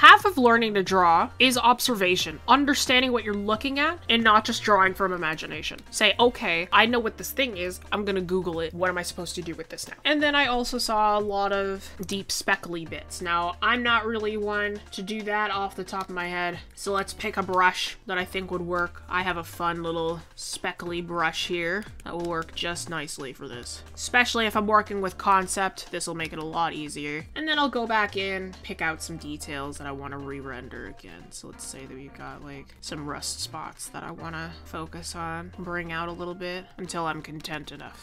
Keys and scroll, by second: 29.6 ctrl+z, 30.8 ctrl+z.